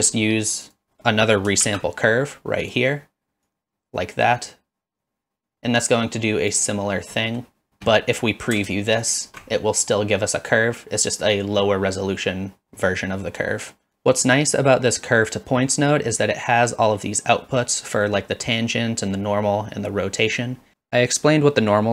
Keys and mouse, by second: 0.7 click, 1.6 shift+d, 2.6 click, 3.6-6.5 drag, 7.3 middle click, 9.0 alt+shift+click.